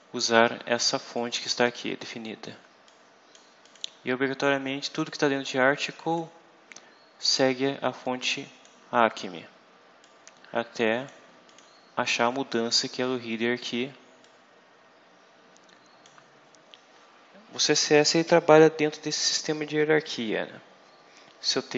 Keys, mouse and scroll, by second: 1.0-2.5 drag, 2.8 click, 3.5 click, 5.0-6.2 drag, 7.9 click, 9.9-11.1 drag, 11.4 click, 14.1-16.1 drag.